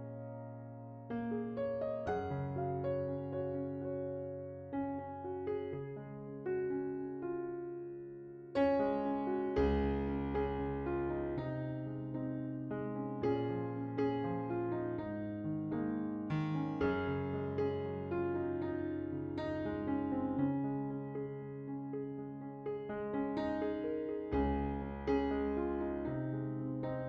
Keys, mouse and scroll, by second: 0.0 middle click, 0.4 middle click, 2.2 middle click, 2.9 scroll up 10, 3.0 middle click, 3.6 click, 4.0 click, 4.5 click, 5.0 scroll down 2, 5.2 middle click, 5.4 scroll up 2, 5.6 shift+middle click, 5.8 click, 5.9 KP_0, 6.5-6.9 drag, 7.6 drag, 8.0 click, 8.5 click, 8.9-10.3 middle drag, 10.3 click, 12.1 shift+d, 16.0 middle click, 16.6 drag, 18.7 middle click, 19.1-19.8 scroll up 11, 19.8-20.2 middle drag, 20.2-21.8 drag, 22.9 ctrl+shift+click, 24.6 scroll down 5, 25.0 click, 26.3 shift+d.